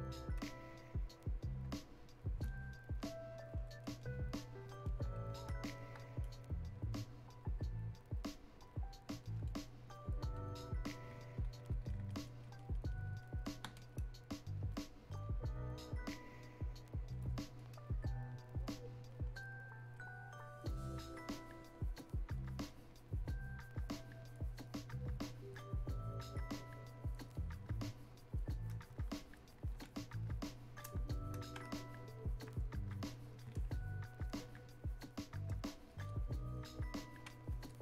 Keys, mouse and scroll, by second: 2.4-6.2 ctrl+drag, 6.2-17.1 drag, 17.1-29.1 drag, 29.1 click, 30.0-37.8 drag.